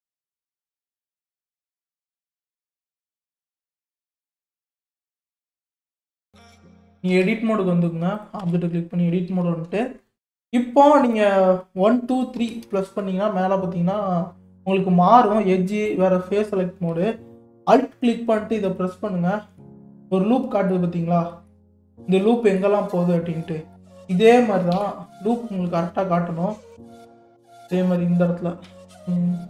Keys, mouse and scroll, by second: 1.5-2.0 scroll up 1, 2.0 click, 2.5-2.9 shift+middle drag, 2.9 scroll up 2, 4.8 scroll up 8, 5.3 scroll down 7, 5.9-7.1 shift+middle drag, 7.1 Tab, 8.2 click, 8.4 Tab, 11.1 click, 12.1 2, 12.4 1, 12.7 2, 14.7 click, 15.8 click, 16.4-18.7 scroll down 4, 18.7 alt+click, 20.0 middle click, 20.8-21.5 scroll down 5, 21.5-22.8 middle drag, 22.8-23.5 scroll up 3, 23.5 middle click, 24.0 scroll down 3, 24.7 KP_3, 25.8 scroll up 4, 26.8 click, 27.6 scroll up 2.